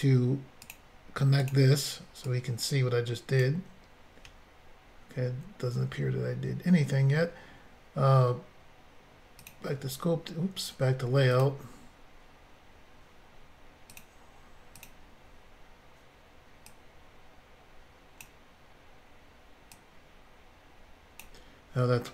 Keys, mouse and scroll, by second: 0.6 click, 0.7 click, 1.4 click, 1.5 click, 2.3 click, 5.0-5.5 scroll up 3, 9.4 click, 11.3 click, 11.4 click, 13.9 click, 14.8 click, 16.7 click.